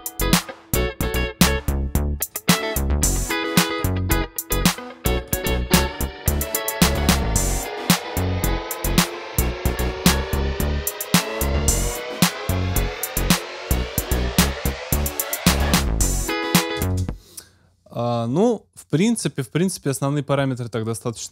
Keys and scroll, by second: 17.0 space.